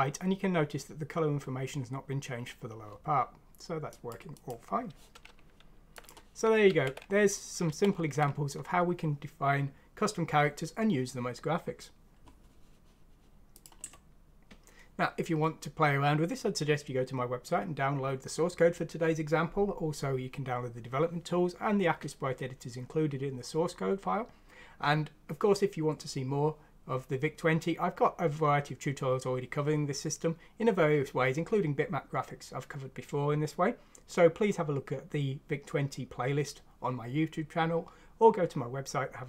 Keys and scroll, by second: 6.6 ctrl+z, 7.6 ctrl+z.